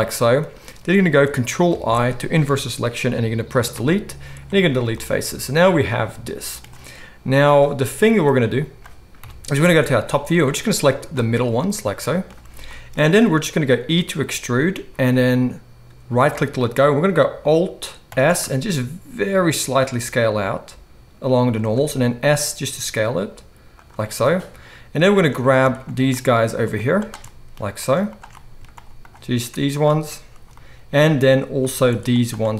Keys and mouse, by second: 1.7 ctrl+i, 3.6 Delete, 9.2 KP_7, 14.3 e, 15.0-21.6 drag, 15.0-16.3 middle drag, 15.0 right click, 18.1 alt+s, 21.6-25.7 shift+middle drag, 22.1 s, 25.7 shift+click, 25.8 shift+middle click, 26.6 shift+click, 26.7 shift+middle click, 26.9 shift+click, 27.0 shift+middle click, 27.8 shift+click, 28.1 shift+middle click, 29.0 shift+click, 30.4 middle click, 32.0 ctrl+shift+click, 32.4-32.5 ctrl+shift+middle drag.